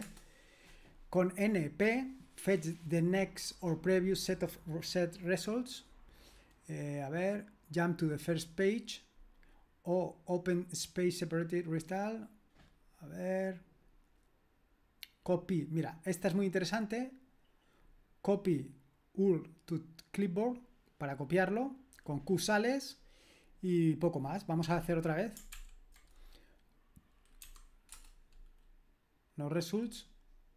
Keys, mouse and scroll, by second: 16.7 Delete, 25.5 ctrl+l, 27.4 n, 27.9 Return.